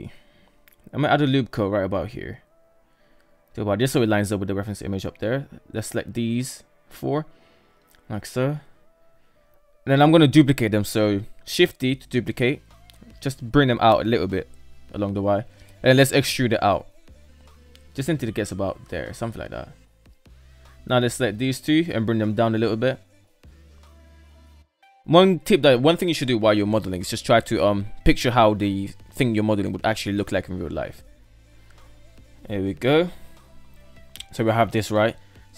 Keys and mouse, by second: 0.4 ctrl+r, 2.8 shift+middle drag, 3.4 right click, 4.0 ctrl+right drag, 5.0-5.6 ctrl+right drag, 6.2-8.0 shift+middle drag, 10.2 shift+d, 14.7 e, 19.7 right click, 20.1 shift+right click, 20.7 g, 23.4 right click, 23.8 shift+right click, 24.5 g, 26.1 right click, 31.3 shift+middle click, 32.3-32.6 shift+middle drag, 33.9 alt+right click, 35.0 Tab, 35.3 KP_7.